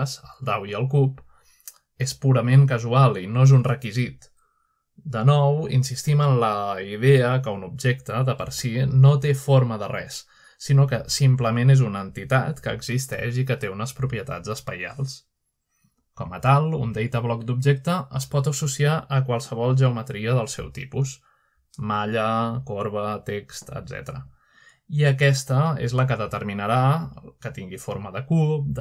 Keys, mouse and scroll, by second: 0.3-1.0 shift+scroll up 2, 0.7-1.4 shift+middle drag, 1.7-3.0 shift+middle drag, 2.2 click, 6.2 click, 7.0-8.0 shift+middle drag, 8.0 click, 8.5-8.9 shift+drag, 8.9 shift+middle click, 9.3-10.0 middle drag, 10.0-10.8 drag, 11.5-12.4 drag, 13.2 click, 17.9 click, 21.1 click, 21.1 typing, 21.9-22.5 drag, 22.5 middle drag, 23.6 middle click, 24.2 middle click, 24.6 shift+middle drag, 25.3 shift+middle click, 26.1 shift+middle click, 26.8 click, 27.7 typing, 28.1 click.